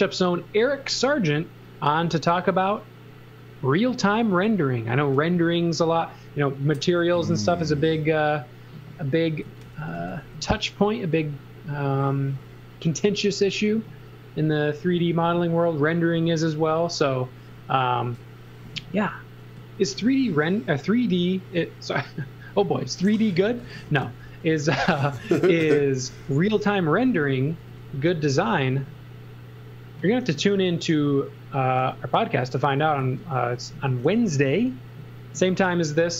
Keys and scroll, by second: 0.9 s, 4.3 space, 7.2 s, 9.2-10.5 typing, 19.6 z, 20.2 space, 23.1-25.2 typing, 27.5 x, 28.2 space, 33.0 x, 34.1 e.